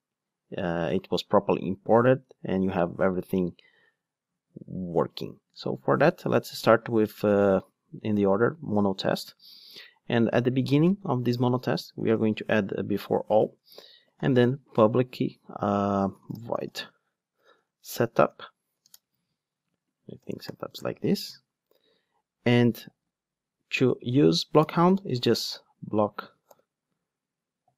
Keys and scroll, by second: 10.8 Tab, 12.7 Tab, 13.0 Return.